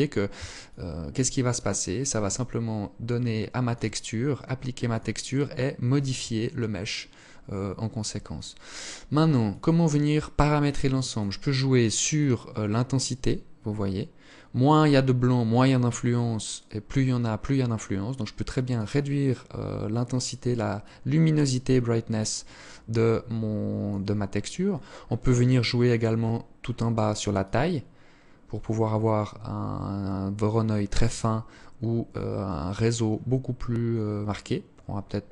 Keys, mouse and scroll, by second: 3.9 click, 5.4 alt+click, 8.6 click, 11.2 click, 18.3 click, 22.1 click, 23.3-24.3 scroll down 12, 24.9-25.9 scroll down 19, 26.5 click.